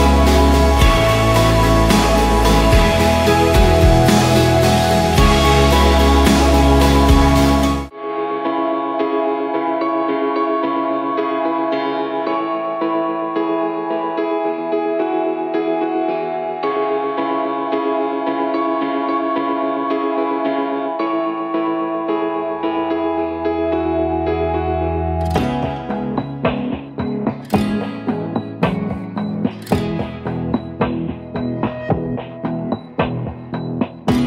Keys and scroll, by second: 0.7 Return, 3.8-4.6 typing, 5.8-8.6 typing, 6.6 Tab, 6.8 Tab, 8.0 Tab, 8.1 Tab, 9.1 Return, 11.6 ctrl+d, 15.6-18.0 typing, 21.3-22.7 typing, 25.3-26.5 typing, 29.2-30.0 typing, 32.8-34.2 typing.